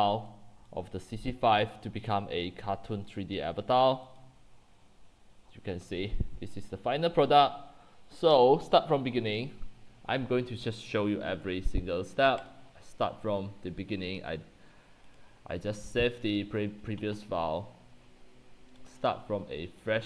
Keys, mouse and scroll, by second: 0.0-3.6 typing, 0.3 click, 1.3 click, 4.6 click, 4.8-5.8 scroll down 10, 5.5-7.7 typing, 8.7 click, 16.4-20.0 drag.